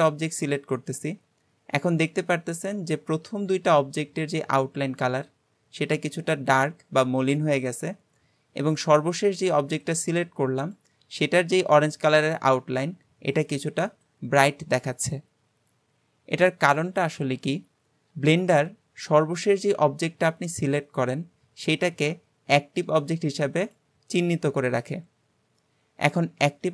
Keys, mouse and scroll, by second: 0.8 shift+click.